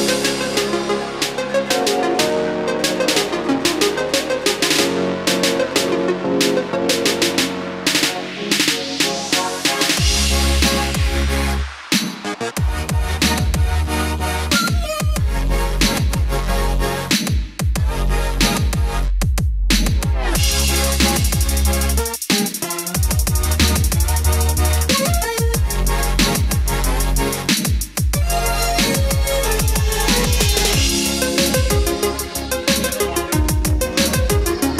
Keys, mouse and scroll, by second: 0.0 middle click, 0.9-1.3 scroll up 1, 1.3 middle click, 2.4 click, 2.6 scroll down 1, 3.6-6.1 ctrl+drag, 7.9 KP_1, 10.6 click, 13.2-14.2 middle drag, 14.9-30.4 drag.